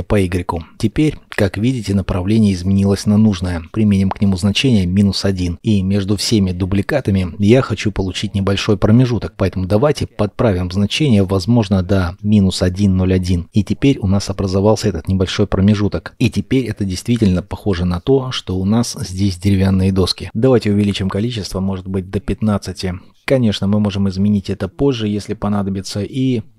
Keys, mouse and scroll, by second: 0.1 KP_1, 1.5 middle click, 5.2 Return, 6.5 scroll up 1, 7.9 double click, 8.9-10.2 scroll, 10.2-11.1 scroll up 1, 11.1 double click, 14.2 Return, 15.0 middle click, 16.1-17.2 scroll, 17.2-18.0 scroll down 1, 18.0 shift+middle click, 20.3 scroll up 1, 21.4 KP_1, 21.6 KP_5, 21.9 Return, 25.3 middle click, 25.7-26.5 scroll up 1.